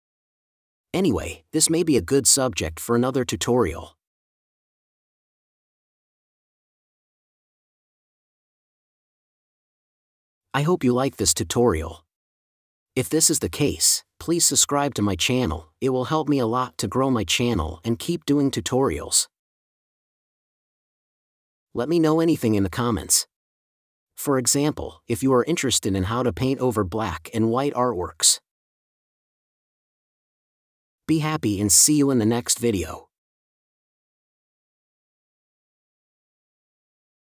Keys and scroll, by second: 0.7 space, 2.1 b, 5.0 space, 13.5 space, 16.3 space, 18.4 space, 21.9 space, 24.8 space, 31.8 space.